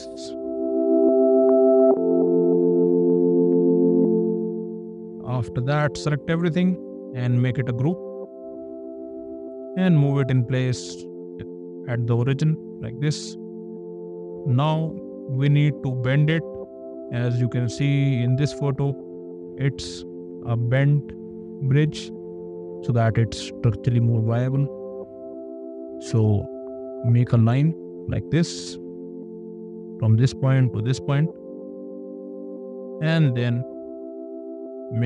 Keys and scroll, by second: 8.5 ctrl+g, 9.6 m, 13.5 space, 26.3 l, 31.8 space.